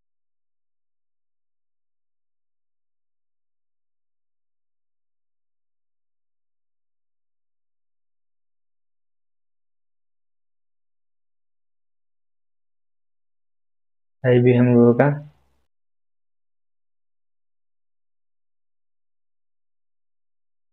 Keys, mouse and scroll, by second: 5.2 space.